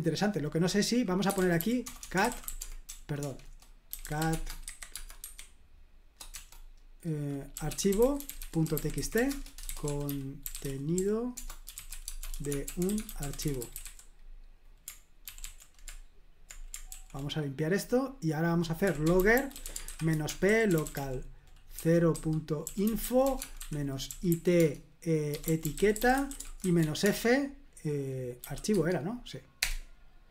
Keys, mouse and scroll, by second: 0.0 click, 1.0-5.4 typing, 7.3-14.3 typing, 15.2 ctrl+d, 15.4 ctrl+d, 16.9 ctrl+l, 18.6-27.3 typing, 28.4 typing, 28.7 Tab, 29.6 Return.